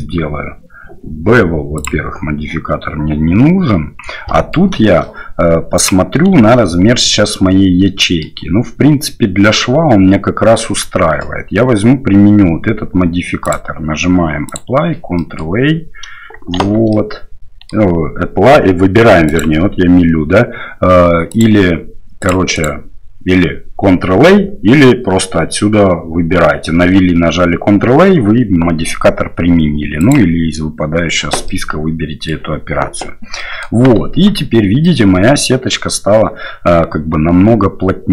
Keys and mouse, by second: 1.7 click, 4.3 middle click, 5.8 click, 6.3 shift+z, 7.1-8.2 middle drag, 13.4-14.7 drag, 15.1 middle click, 16.6 shift+z, 16.9 middle click, 19.3-20.5 drag, 21.3 click, 22.2 click, 22.5-26.4 drag, 30.1-30.5 drag, 31.5 middle click, 33.4 middle click, 34.1 Tab, 34.8-38.1 middle drag.